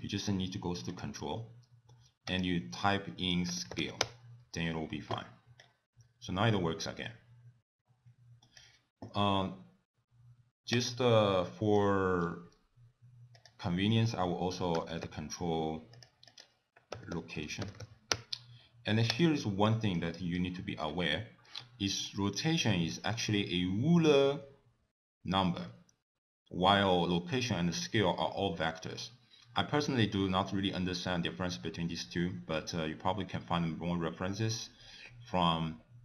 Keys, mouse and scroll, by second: 2.3 click, 5.6 click, 10.7 click, 11.4 middle click, 12.2-12.7 scroll down 7, 13.4 click, 16.3 click, 19.2 click, 19.7 middle click, 20.3-21.1 scroll down 6.